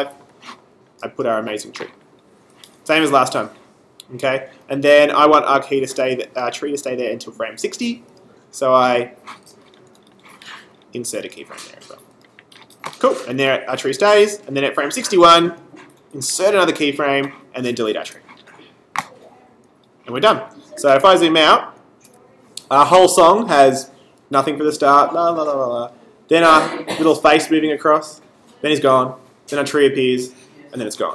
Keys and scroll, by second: 18.1 BackSpace, 21.4 super+-.